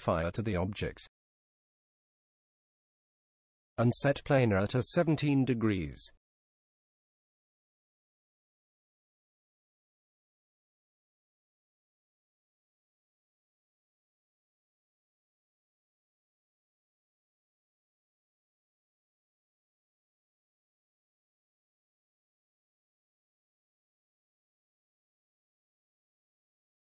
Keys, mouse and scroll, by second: 4.9-6.7 drag, 8.2-10.0 drag.